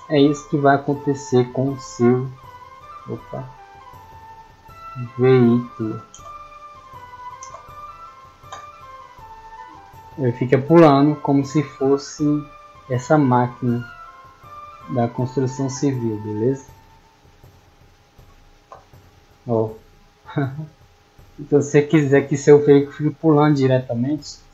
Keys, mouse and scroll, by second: 11.2 d, 11.7 w, 12.3 w, 14.7 middle drag, 15.4 scroll up 2, 16.4 click, 17.2 click, 17.6-17.9 middle drag.